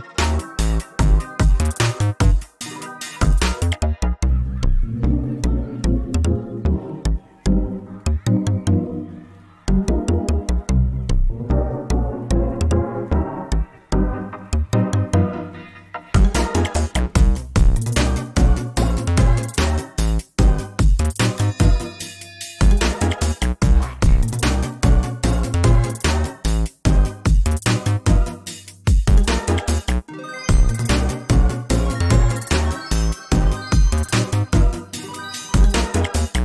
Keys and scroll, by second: 1.9 ctrl+shift+z, 6.7 ctrl+space, 7.8 ctrl+space, 13.0 ctrl+space, 16.3 ctrl+space, 19.6 ctrl+z, 21.1 ctrl+space, 24.7 ctrl+z, 26.8 ctrl+s, 30.6 ctrl+space.